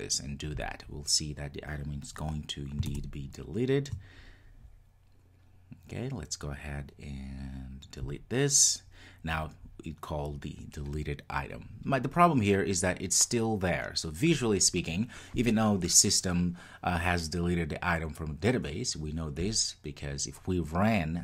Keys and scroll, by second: 0.7 ctrl+r.